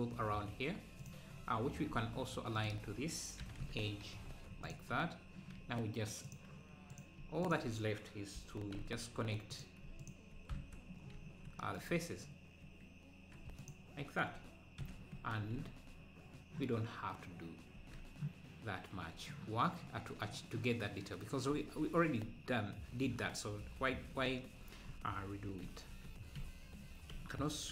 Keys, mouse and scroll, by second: 0.2 ctrl+r, 1.3-2.2 scroll up 5, 3.5 s, 4.9-5.6 scroll down 1, 6.2 scroll down 1, 7.0 click, 7.5 shift+click, 8.4 f, 9.6 click, 10.1 shift+click, 10.5 f, 11.0 scroll down 1, 11.1 `, 11.8-12.2 scroll up 3, 13.7 alt+click, 14.8 f, 15.2 Tab, 15.5 scroll down 4, 15.6 `, 16.4 scroll down 1, 22.4-23.1 scroll up 2, 23.3 scroll down 1, 24.2 scroll up 1, 25.3 scroll up 1, 26.1 Tab, 26.8-27.2 scroll up 2.